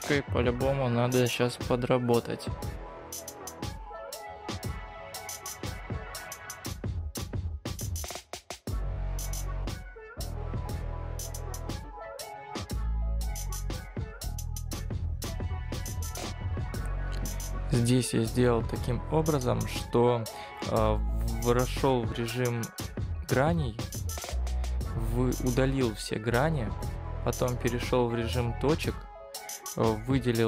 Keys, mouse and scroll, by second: 4.7-6.8 scroll up 2, 19.3 shift+click.